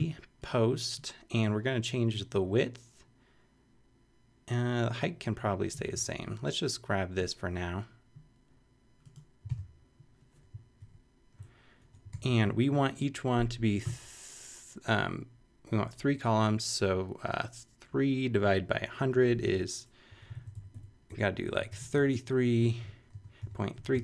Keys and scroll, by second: 5.8 super+c, 9.6 super+v, 10.8 super+], 11.8 super+Return, 12.1 shift+], 20.1 Up, 20.3 super+Right, 20.5 super+Left, 21.3 shift+Left, 21.8 shift+Right, 22.6 shift+3, 23.1 3.